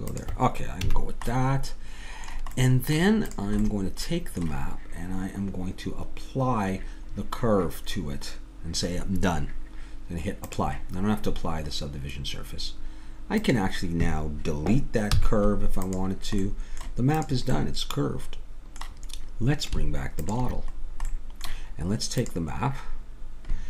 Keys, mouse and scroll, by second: 0.8 a, 1.0 middle click, 3.3-5.8 drag, 10.5-12.2 drag, 12.2-13.3 middle drag, 13.3-16.0 drag, 15.1 x, 16.4 middle click, 17.2 click, 18.1 middle click, 20.2-22.1 middle drag.